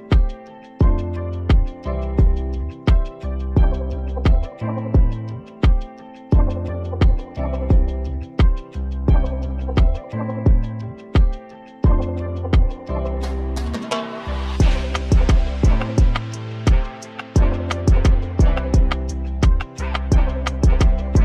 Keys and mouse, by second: 2.9-4.1 drag, 5.8 e, 9.0-11.5 middle drag, 11.5 click, 12.4 right click, 12.8 middle click, 14.7 Tab, 15.2 click, 16.9 Tab, 17.7 ctrl+r, 18.1 click, 18.5 r, 19.4 ctrl+z, 19.9 ctrl+r.